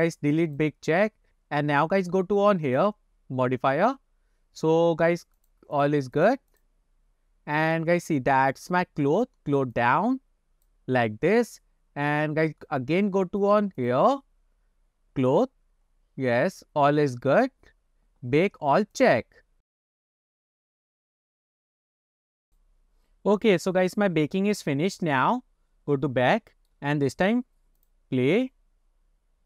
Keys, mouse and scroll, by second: 0.5 click, 2.7 click, 5.4 click, 5.8 click, 6.2 click, 6.6 click, 8.6 click, 9.8-10.7 drag, 13.4 click, 13.8 click, 15.6-18.4 scroll down 19, 17.9-18.4 scroll up 7, 22.5 click, 25.4 scroll down 2, 26.4-26.7 shift+middle drag, 27.8 click.